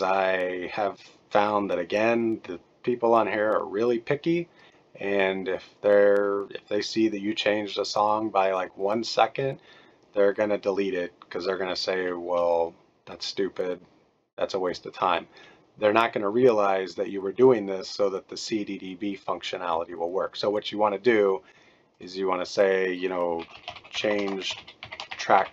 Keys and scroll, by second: 23.1-25.5 typing.